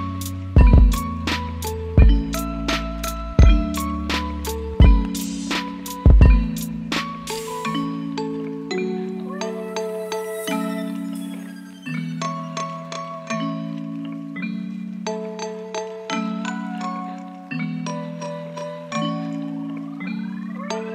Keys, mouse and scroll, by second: 0.4 F9.